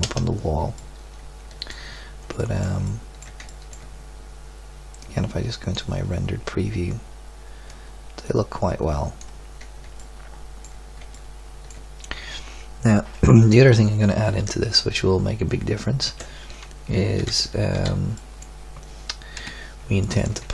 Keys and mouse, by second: 0.0 KP_0, 0.7-2.5 middle drag, 5.0 drag, 8.0 click, 8.6-9.9 drag, 10.3 middle click, 16.2 Escape, 17.3 z, 17.7 z, 19.4 KP_1.